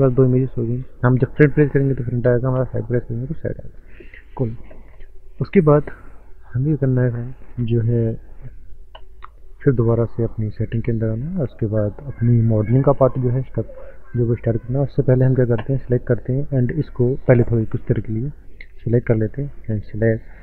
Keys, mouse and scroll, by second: 0.0 scroll down 4, 0.2 middle click, 0.2 middle click, 0.3 scroll up 3, 0.4 middle click, 0.5 middle click, 1.4 KP_1, 2.6 KP_3, 3.4 scroll up 3, 5.6 click, 6.6 click, 9.8 click, 10.3 click, 13.8 scroll down 4, 15.0 click, 16.5 scroll down 2, 18.6 click, 19.1 scroll up 3, 19.4 click, 19.5 click, 19.9 shift+middle click, 20.0 shift+middle click.